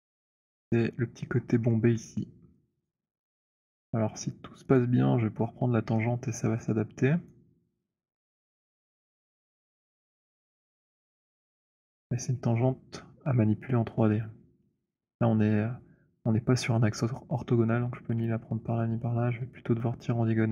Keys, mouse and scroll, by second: 0.5 alt+middle click, 1.9 middle click, 2.4 alt+middle click, 3.0 alt+click, 4.8 click, 7.2 right click, 10.0 click, 11.7 alt+click.